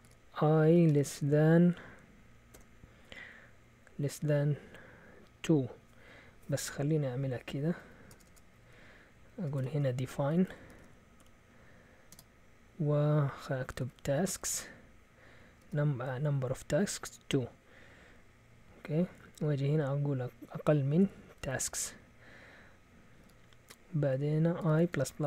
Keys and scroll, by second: 0.0-0.9 typing, 2.3-3.0 typing, 4.1 typing, 7.0 Up, 7.2 Up, 7.3 Up, 7.8 Down, 8.1 Return, 8.3 Return, 8.6 Up, 9.6-12.1 typing, 13.5-16.8 typing, 18.8-19.7 typing, 21.0-21.7 typing, 23.2 typing, 24.6-25.2 typing.